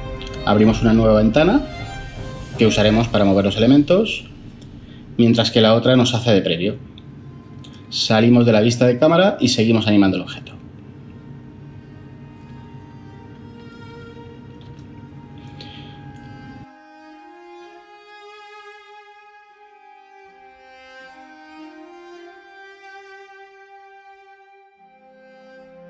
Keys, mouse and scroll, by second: 3.4 n, 5.1 typing, 22.4 n.